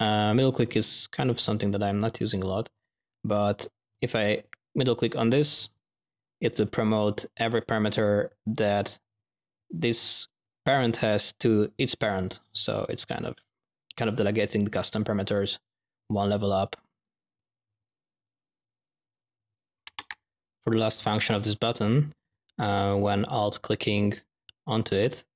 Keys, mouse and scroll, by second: 3.8 click, 5.2 middle click, 6.7-9.0 drag, 12.5-13.0 drag, 13.0 z, 13.2 click, 16.2-17.0 drag, 17.3-17.8 drag, 18.2-18.8 drag, 19.6 click, 19.7 ctrl+alt+-.